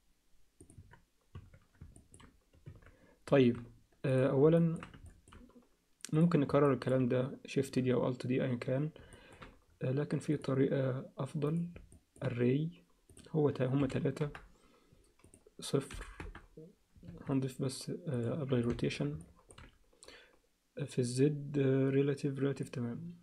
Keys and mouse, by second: 0.8 Tab, 1.3 Tab, 2.0 ctrl+middle click, 2.7 Tab, 3.4 alt+a, 4.6 alt+shift+middle click, 5.1 ctrl+alt+middle click, 6.6 alt+middle click, 9.1 alt+shift+middle click, 10.4-11.6 drag, 11.9 middle click, 13.1-14.4 drag, 15.2-16.3 drag, 17.1 ctrl+a, 18.7 ctrl+alt+click, 19.2 ctrl+alt+middle click, 22.6-23.2 drag.